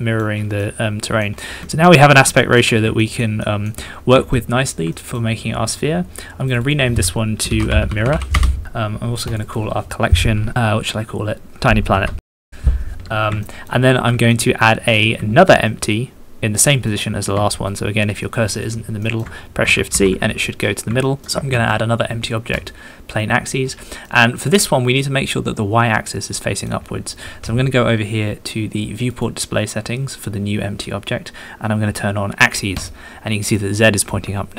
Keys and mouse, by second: 0.6 middle click, 1.6 shift+middle click, 2.3 shift+middle click, 3.0 shift+click, 3.4 shift+click, 4.3 shift+middle click, 5.1-6.4 middle drag, 6.5 middle click, 7.4 shift+middle click, 8.0 r, 8.3-9.3 middle drag, 9.4-12.5 middle drag, 12.4 BackSpace, 13.4 shift+middle click, 14.3 shift+middle click, 14.6 shift+click, 15.7 shift+click, 16.8 middle click, 17.5 shift+click, 18.2 shift+click, 19.1 shift+click, 19.9 shift+c, 21.0 shift+click, 21.5 shift+a, 24.0-26.7 middle drag, 29.1 middle click, 33.5 middle click.